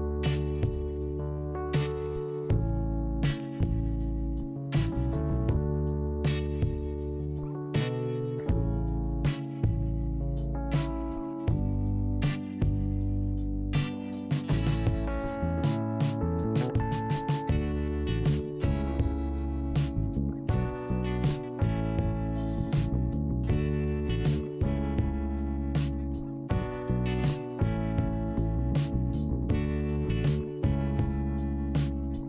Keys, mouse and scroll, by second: 3.7 click, 5.1 click, 6.5 click, 7.8 click, 9.7-10.4 scroll down 1, 10.7 click, 11.3 scroll down 1, 12.4 click, 14.3 click, 17.4 click, 17.6 click, 18.5 click, 20.0 click, 21.7 click, 23.3 click, 23.8-24.6 scroll up 1, 24.9 click, 26.5 click, 29.5 click, 30.9 click.